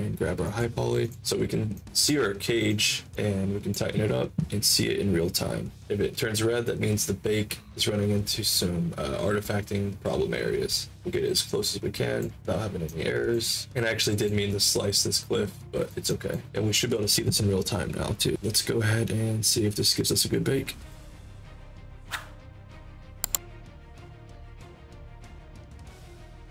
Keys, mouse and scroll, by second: 0.4 click, 1.0 click, 1.2 alt+click, 1.7-2.0 alt+drag, 2.2 ctrl+alt+click, 2.6 ctrl+alt+click, 5.8-12.1 drag, 12.8 alt+click, 13.6 alt+click, 14.9 alt+click, 16.0 alt+click, 16.4 alt+right click, 20.8 click.